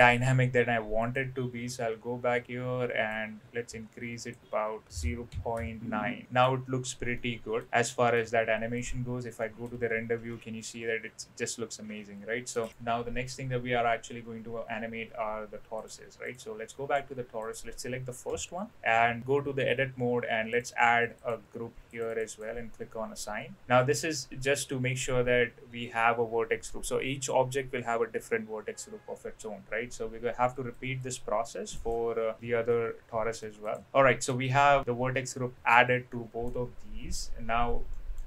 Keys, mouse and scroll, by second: 1.1 click, 3.2-4.4 drag, 4.9 click, 6.2 middle click, 6.2 space, 7.1-7.6 middle drag, 7.8 middle click, 8.8 click, 9.4 middle drag, 9.7 space, 10.3-12.5 middle drag, 15.8 click, 16.3 click, 16.7 middle click, 17.4 click, 18.3 Tab, 21.3 click, 21.9 click, 22.1 click, 22.3 click, 23.6 Tab, 24.1-24.6 middle drag, 30.5 right click, 31.7 click, 32.4 Tab, 33.6 click, 33.8-34.3 middle drag, 34.5-34.8 middle drag, 35.1-35.5 middle drag, 36.1-36.4 middle drag, 37.9 middle drag.